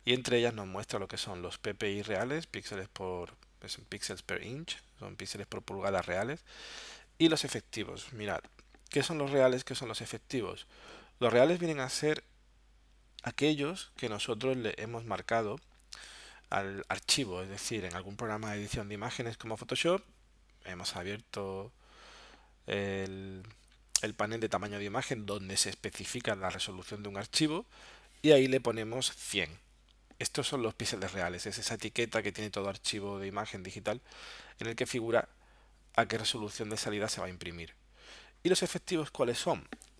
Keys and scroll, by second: 14.6 alt+super+-.